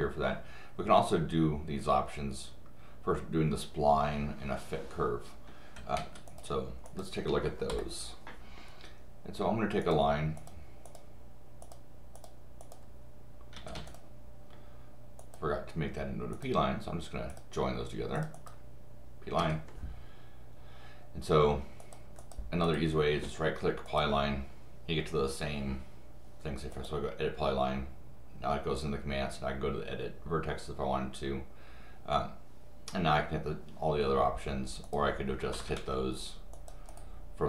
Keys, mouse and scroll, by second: 5.8 Escape, 6.0 Escape, 6.9 click, 9.8 click, 10.4 click, 10.8 click, 12.2 click, 12.6 click, 13.5 Escape, 13.7 Escape, 13.9 click, 15.2 click, 16.3 click, 17.3 click, 18.2 click, 18.3 click, 21.8 click, 22.2 click, 22.6 right click, 23.8 click, 26.7 click, 34.8 click, 35.5 Escape, 36.5 click, 36.9 right click.